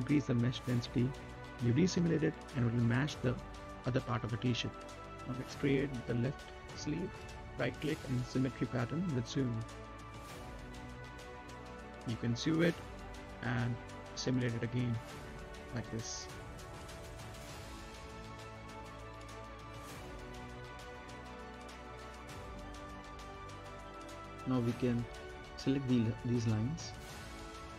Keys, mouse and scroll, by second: 0.7 click, 1.0-1.5 scroll up 1, 1.5 right click, 1.9 space, 2.2-2.5 scroll up 1, 2.5 middle click, 2.8 right click, 3.2-3.5 scroll down 1, 4.9 click, 5.2 middle click, 6.1 right click, 10.7 click, 14.7-15.4 scroll down 1, 15.4 middle click, 15.8 right click, 16.3 middle click, 16.8 scroll up 1, 17.1 middle click, 17.5-18.0 scroll down 1, 18.0 n, 18.3 click, 18.7 right click, 19.0 middle click, 19.7 click, 20.2 scroll up 1, 20.6 right click, 20.9-21.3 scroll down 2, 21.0 middle click, 21.3 right click, 21.6 space, 22.7 right click, 23.1 q, 23.9-25.1 scroll down 1, 25.1 click, 26.0 middle click, 26.6 z, 27.3 click.